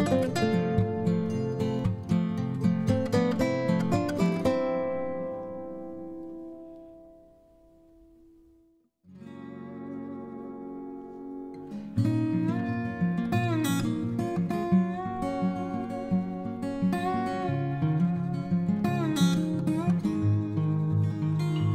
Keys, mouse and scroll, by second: 14.5 typing.